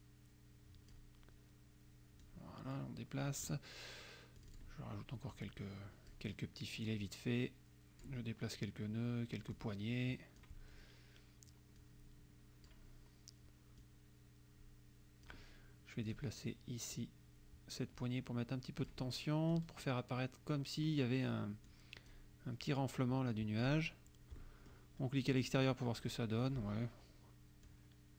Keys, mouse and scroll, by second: 2.3-3.6 drag, 4.4 click, 5.4 click, 6.9-8.2 drag, 9.6-10.6 drag, 11.9-12.9 drag, 13.9-15.5 drag, 16.1 click, 17.0-19.1 drag, 19.6-21.0 drag, 21.7 click, 23.6 click, 24.4 middle click, 25.5 click, 26.5 click, 27.7-28.1 drag.